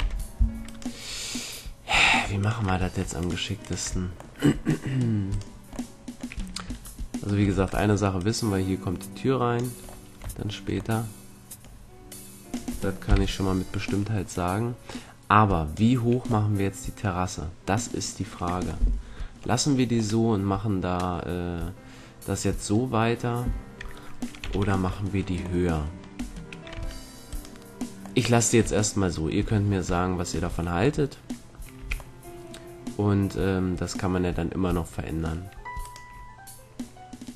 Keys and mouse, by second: 2.4-5.5 drag, 5.2-6.6 middle drag, 6.6 Tab, 8.1-9.5 right drag, 9.8-11.0 drag, 11.0-12.0 middle drag, 12.0-13.0 drag, 13.0 KP_3, 16.5-20.1 middle drag, 21.8-26.7 middle drag, 24.4 t, 26.1 a, 26.7 Tab, 28.6 Tab, 29.6 Tab, 30.0 Tab, 30.3 Tab, 31.8 a, 32.1-34.0 middle drag, 35.8-37.3 right drag.